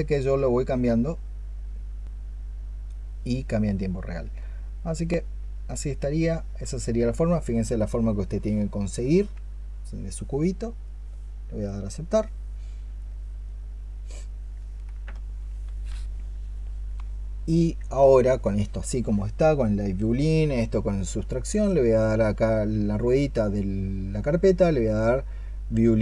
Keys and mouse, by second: 13.3 double click, 14.4 double click.